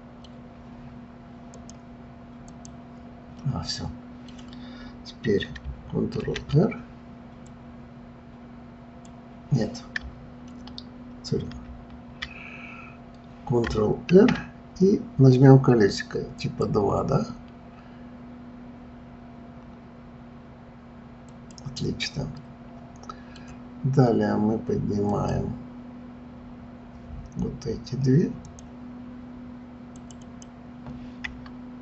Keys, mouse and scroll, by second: 1.4-3.3 drag, 3.3 scroll down 1, 3.4-6.2 middle drag, 6.2 ctrl+r, 11.4 ctrl+z, 14.1 ctrl+r, 21.4 click, 22.4-25.1 middle drag, 25.1 click, 28.4 click, 29.9 click, 30.2 click.